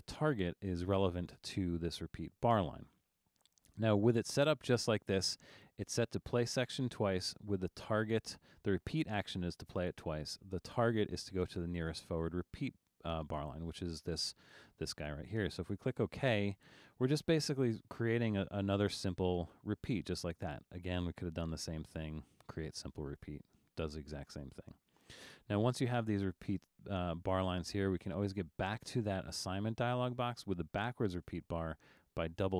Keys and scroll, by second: 24.0 super+z.